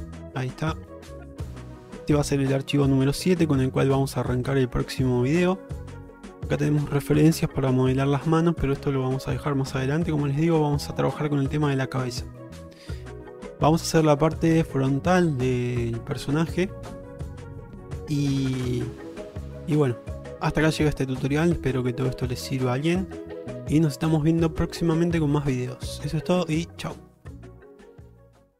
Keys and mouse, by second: 5.2 shift+middle drag, 8.8-9.1 shift+middle drag, 9.8-10.2 shift+middle drag, 17.8 shift+middle drag, 19.0 shift+middle click, 19.5-20.6 middle drag, 21.2 shift+middle drag, 21.5-22.4 middle drag, 23.8-25.0 middle drag, 25.3 shift+middle drag, 26.1 shift+middle drag.